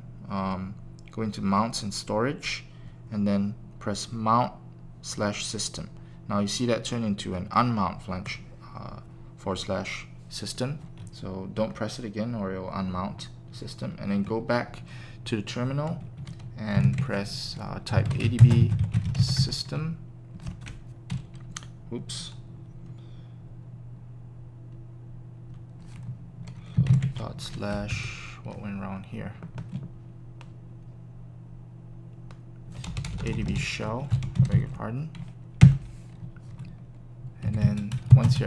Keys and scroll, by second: 17.7-19.3 typing, 19.4 Return, 27.9 Up, 33.8-35.6 typing, 35.6 Return, 37.4-37.8 typing.